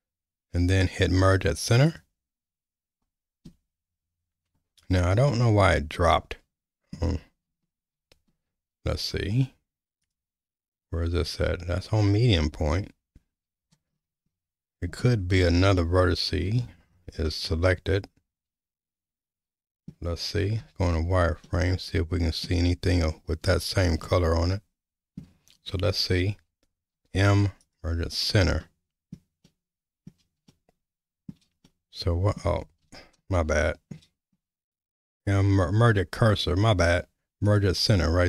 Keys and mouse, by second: 5.3-6.9 middle drag, 8.0 ctrl+z, 10.0-13.6 drag, 15.0 shift+middle click, 15.8 middle click, 17.3-19.9 middle drag, 21.4-22.4 middle drag, 24.0-25.2 middle drag, 26.9 m, 28.6 middle click, 29.4 middle click, 30.5 shift+middle click, 31.6 middle click, 32.8 ctrl+z, 33.4 middle click, 34.7 m.